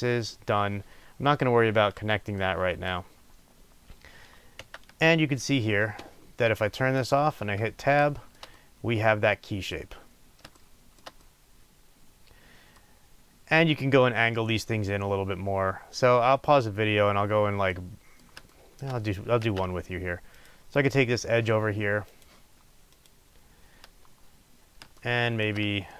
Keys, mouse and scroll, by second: 2.4 middle click, 3.1-4.2 scroll down 2, 4.2-5.0 scroll down 1, 5.0 Tab, 7.0 click, 8.1-19.5 shift+middle drag, 9.8-10.5 scroll up 2, 13.0-17.1 scroll up 2, 19.1-19.5 scroll up 2, 19.5 b, 20.3 click, 25.0 shift+middle click.